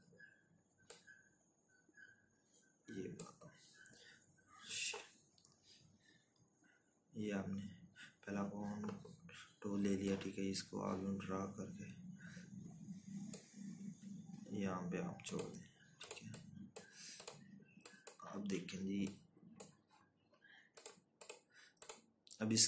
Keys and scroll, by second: 21.1 z.